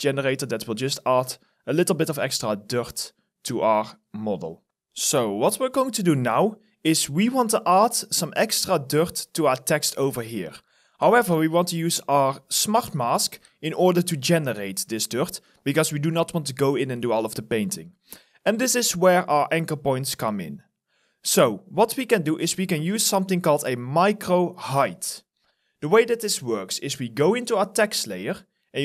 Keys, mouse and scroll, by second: 6.4 alt+right click, 8.0 alt+middle click, 15.4 alt+click, 17.7 alt+middle click, 18.8 alt+right click.